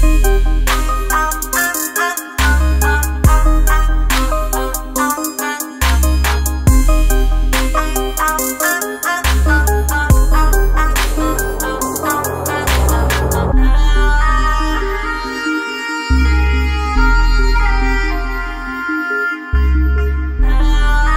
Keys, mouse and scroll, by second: 5.4 click, 6.2 shift+5, 8.9-11.3 drag, 11.3 s, 12.7-13.2 typing, 14.4-16.5 typing, 16.7 ctrl+Return, 18.7 scroll down 1.